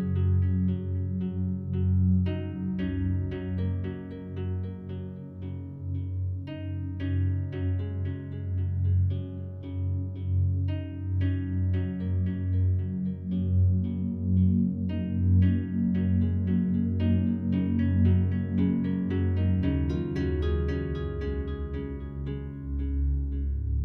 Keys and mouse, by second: 0.8 Escape, 2.0 ctrl+z, 3.4 click, 5.6 e, 7.5 z, 8.5 click, 9.4 Tab, 10.9 click, 12.3 ctrl+z, 12.5 ctrl+z, 13.5 ctrl+z, 14.0 ctrl+z, 17.4 g, 17.8 z, 18.5 click, 19.2 Tab, 19.6 g, 20.1 z, 21.9 click, 22.5-23.2 drag, 23.4-23.8 drag.